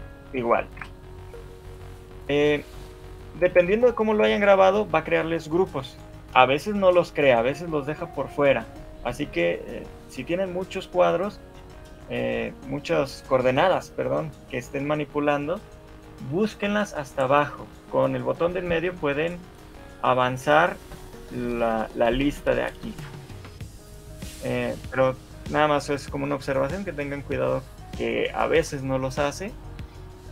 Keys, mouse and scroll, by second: 0.8 Escape.